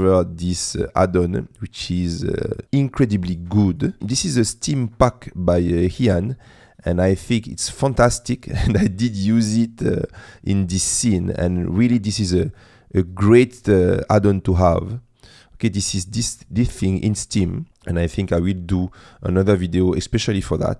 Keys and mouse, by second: 3.1 click, 3.9 click, 12.5-17.7 drag.